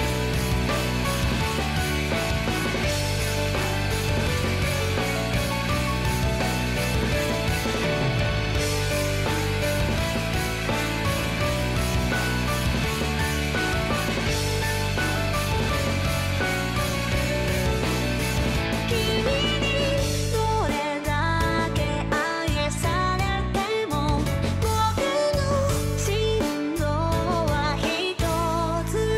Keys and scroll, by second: 11.7 ctrl+z, 12.3 ctrl+z, 12.6 ctrl+z, 12.7 ctrl+z, 17.6 ctrl+z, 25.7 ctrl+z, 25.9 ctrl+z, 26.0 ctrl+z, 26.0 ctrl+z, 28.6 ctrl+z, 28.9 ctrl+z, 29.0 ctrl+z.